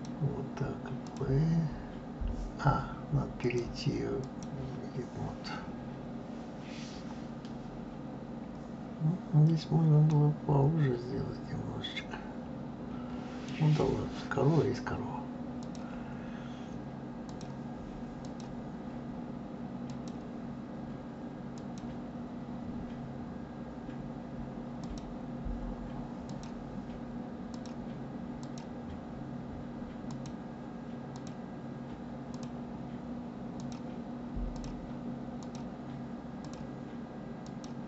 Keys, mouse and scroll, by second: 1.0-6.4 drag, 10.1-13.2 middle drag, 15.6 click, 17.2-18.4 drag, 19.8-21.7 drag, 24.8 click, 26.2 click, 27.5 click, 28.4 click, 30.0-30.5 drag, 31.1 click, 32.3-33.7 drag, 34.5 click, 35.4 click, 36.4 click, 37.4 click.